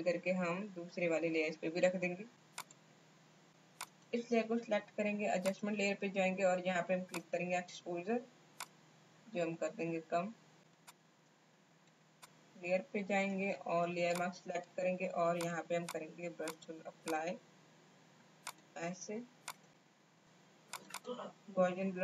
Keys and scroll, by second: 13.3 b.